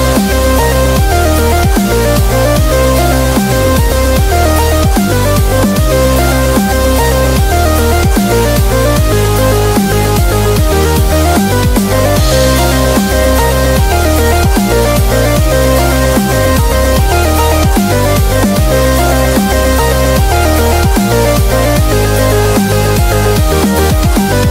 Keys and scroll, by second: 2.4 Return, 6.1 super+-, 6.2 super+-, 6.4 super+-, 8.0 super+=, 8.4 b, 10.6-11.3 typing, 12.9 super+z, 23.7 super+-, 23.9 super+-.